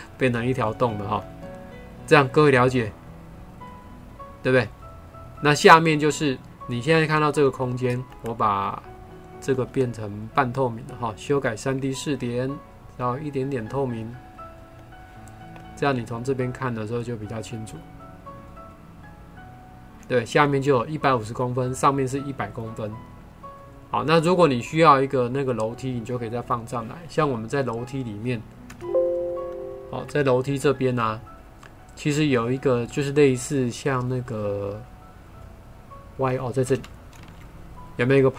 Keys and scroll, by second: 28.9 BackSpace, 37.1 ctrl+4.